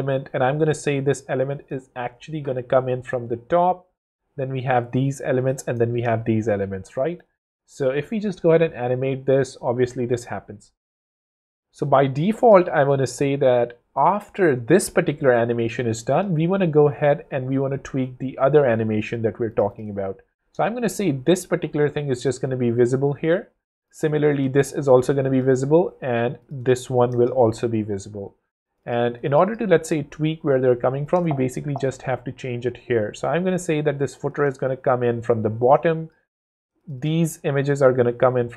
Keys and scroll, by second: 4.4 0, 5.9 0, 7.3 w, 10.4 w, 12.8 super+z, 17.3 super+d, 20.5 0, 24.3 0, 27.1 0, 31.1 shift+space.